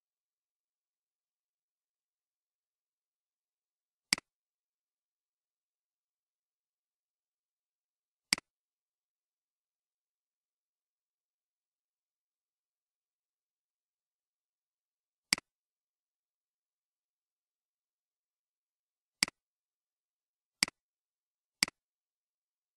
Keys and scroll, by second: 0.0-0.3 typing, 0.4 Return, 4.6-5.3 typing, 5.4 Return, 7.7 typing, 9.3-10.1 typing.